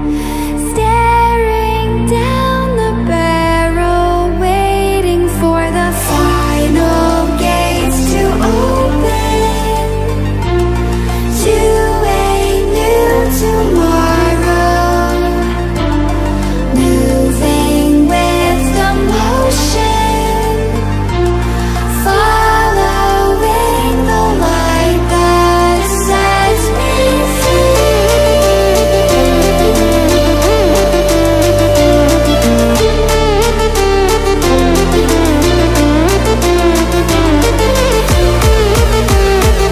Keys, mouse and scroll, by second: 0.2 ctrl+alt+scroll down 1, 0.7 ctrl+alt+scroll up 1, 2.7 click, 6.4 click, 13.0 click, 16.3 ctrl+alt+scroll down 1, 17.0 ctrl+alt+scroll down 1, 17.4 ctrl+alt+scroll up 1, 19.2 scroll down 2, 19.6 ctrl+alt+scroll up 1, 23.6 click, 26.9-34.7 drag, 32.0-32.6 click, 32.6-33.8 drag, 35.1-37.6 drag.